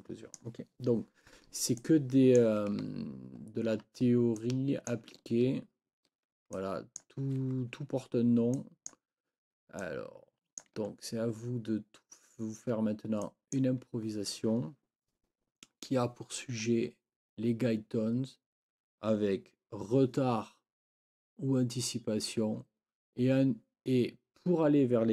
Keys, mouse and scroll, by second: 0.0 click, 1.8 click, 3.4 ctrl+scroll down 2, 4.4 click, 4.6 click, 6.6 ctrl+click, 8.6 click, 10.6 ctrl+click, 12.2 ctrl+scroll down 2, 13.2 click.